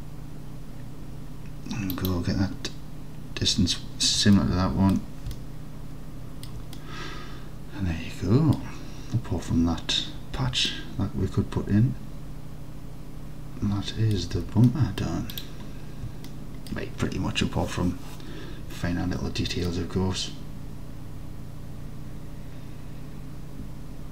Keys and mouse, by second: 2.0 middle click, 4.5 middle click, 5.5-6.5 alt+drag, 6.8-8.6 drag, 10.9-14.2 alt+drag, 14.4 Tab, 14.7-15.1 drag, 16.3 alt+click, 16.7 alt+click, 19.7-24.1 alt+middle drag.